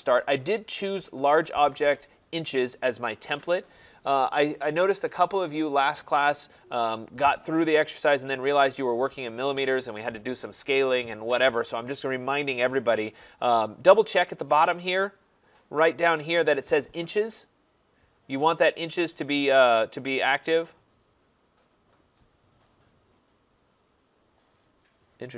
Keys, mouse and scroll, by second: 20.8-25.3 drag.